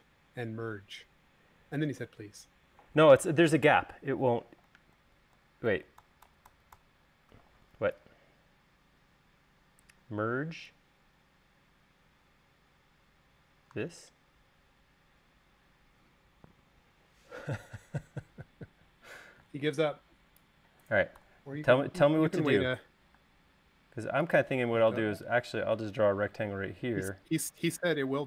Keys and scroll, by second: 5.4 super+z, 19.1-19.8 typing, 21.6 BackSpace, 23.5 r.